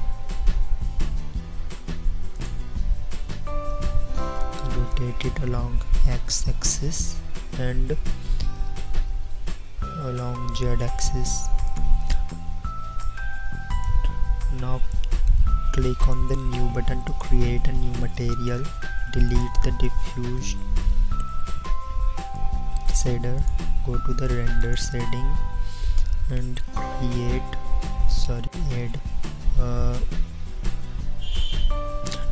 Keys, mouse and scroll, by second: 1.4 s, 3.2 r, 8.6 r, 21.3 x, 22.4 middle click, 24.7 click.